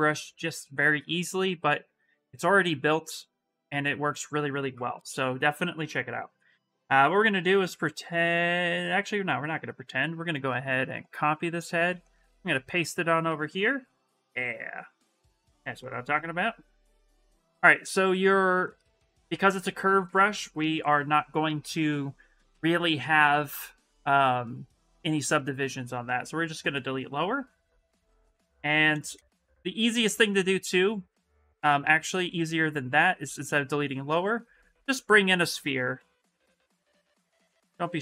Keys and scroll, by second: 18.9 s, 27.2 s, 32.7 ctrl+z, 35.6 w.